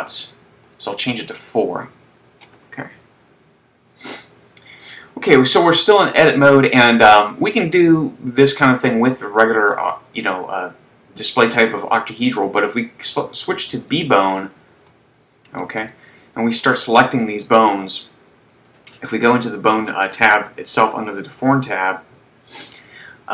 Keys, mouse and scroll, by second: 0.9 click, 14.2 click, 16.0 right click, 18.8 click, 21.5 click, 23.1-23.3 scroll down 1.